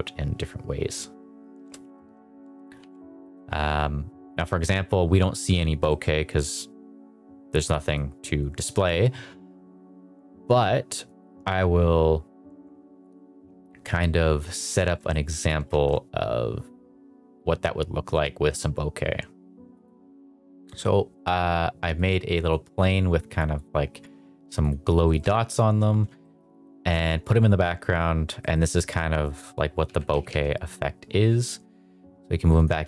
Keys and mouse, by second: 2.9 ctrl+s, 3.2 middle click, 5.9 shift+middle click, 7.8 click, 14.6 middle drag, 15.1 shift+middle drag, 15.6 shift+a, 19.7 drag, 20.2 s, 21.9-22.4 drag, 22.8 click, 24.6 click, 25.0 shift+middle drag, 26.2 shift+middle drag, 28.4 shift+middle drag, 29.8 g, 30.1 z, 30.2 z, 32.5 click.